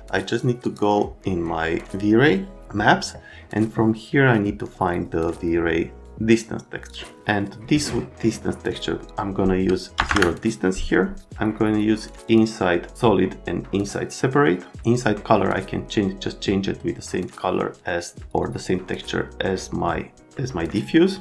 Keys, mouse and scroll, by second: 6.9 click, 9.7 KP_Enter, 9.9 KP_0, 10.0 KP_Enter, 12.3 click, 12.8 click, 20.3 right click.